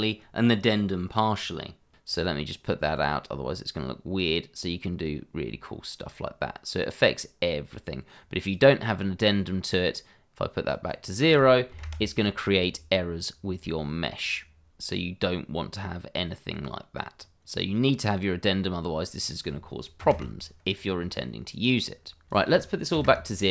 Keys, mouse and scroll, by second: 10.7 click, 11.2 double click, 11.7 0, 11.8 Return, 13.8 click, 19.2 click, 20.0 0, 20.1 Return, 22.3 click, 22.9 0, 23.0 Return.